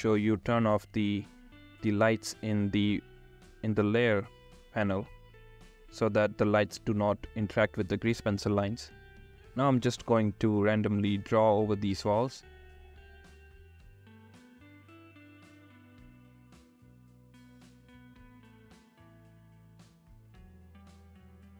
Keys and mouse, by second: 7.4 ctrl+z, 14.5-17.9 drag, 18.9 ctrl+z.